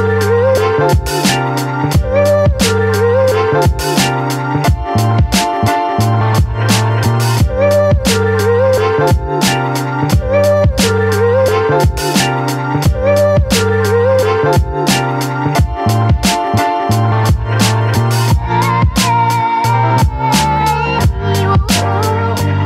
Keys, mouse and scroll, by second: 2.4 Down, 6.3 space, 6.6 click, 6.8 space, 8.2 click, 9.2 ctrl+a, 9.6 ctrl+c, 10.6 click, 11.0 space, 11.2 click, 11.2 click, 11.5 space, 12.0 click, 14.6 ctrl+d, 15.1 ctrl+v, 16.1 right click, 17.4 click, 18.5 ctrl+t, 19.3 space, 19.5-21.2 alt+drag, 21.2-22.6 alt+drag.